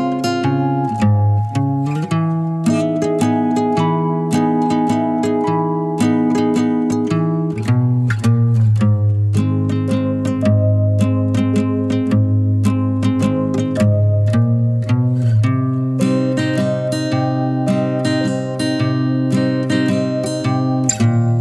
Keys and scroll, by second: 1.3-4.0 typing, 19.8-21.4 typing.